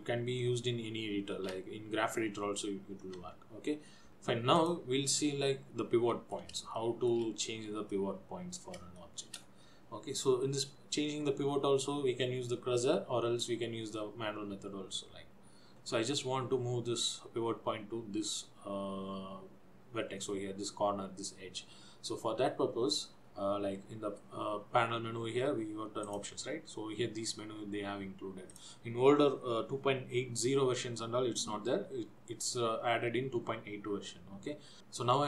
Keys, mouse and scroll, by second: 4.8 click, 5.4 middle click, 7.0 shift+middle click, 7.6 scroll up 3, 8.2 middle click, 9.1 shift+middle click, 16.6-19.6 scroll up 2, 26.1 click, 28.7 click.